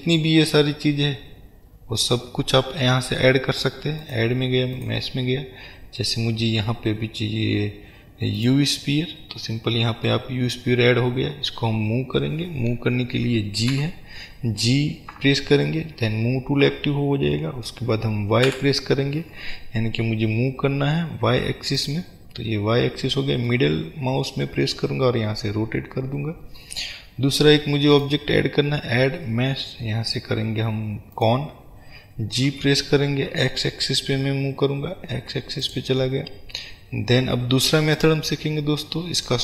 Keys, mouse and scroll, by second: 9.8 middle click, 10.4 scroll up 1, 13.8 g, 22.0 click, 23.6 middle click, 27.6 middle click, 28.0-35.9 drag, 38.0 click.